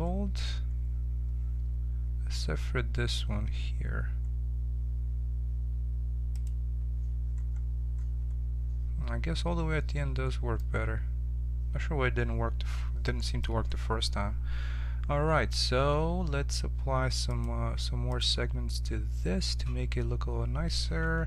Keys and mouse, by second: 2.9-6.3 middle drag, 6.3-8.0 drag, 8.0-9.1 middle drag, 10.1-12.3 middle drag, 14.4-17.2 middle drag, 17.2-20.6 drag, 20.6 middle click.